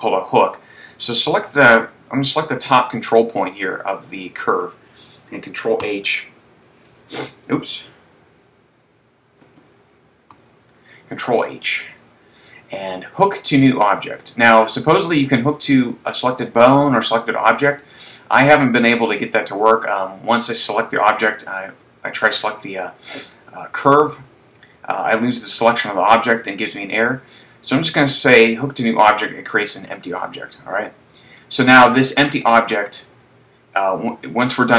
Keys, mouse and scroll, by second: 1.8 right click, 6.0 alt+h, 8.0 click, 10.3 ctrl+h, 32.6 right click.